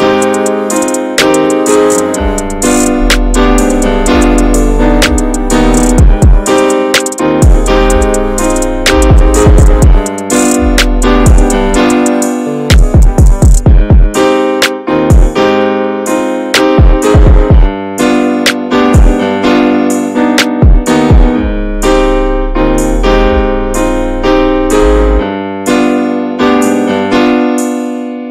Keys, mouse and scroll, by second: 0.7 scroll down 2, 1.0 middle click, 1.6 click, 1.9 Tab, 2.0-2.4 middle drag, 2.4 ctrl+s, 2.7-3.7 shift+middle drag, 3.7 Tab, 3.9 click, 4.3 l, 4.7 l, 5.3 click, 6.1 Tab, 6.3 click, 6.6 middle click, 6.8 ctrl+s, 7.0 click, 7.3 shift+a, 8.2 click, 8.6-9.1 middle drag, 9.1-9.4 scroll up 2, 9.4 Tab, 9.6 click, 10.2 alt+middle click, 10.7 scroll down 2, 11.0 shift+middle click, 11.9 e, 13.8 shift+middle click, 14.3 scroll up 1, 14.4 click, 14.7 ctrl+s, 15.1 click, 15.6 Tab, 15.8 click, 16.7 shift+a, 18.6-21.8 drag, 22.0 drag, 22.3 click, 22.5-23.7 right drag, 24.1-24.6 shift+middle drag, 24.6 click, 25.8 click, 26.3-26.9 drag, 27.1 scroll up 2, 27.4-27.8 shift+middle drag, 27.8-28.3 scroll up 2.